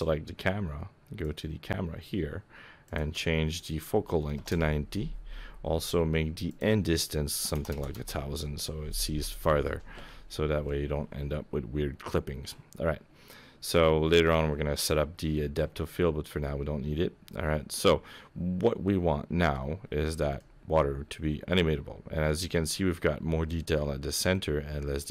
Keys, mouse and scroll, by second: 1.2 click, 2.8 click, 6.5 click, 7.7 KP_0, 16.4 middle click, 19.8-20.4 scroll down 9, 20.4 middle click, 22.6-23.2 scroll down 4, 24.1-25.1 scroll up 5.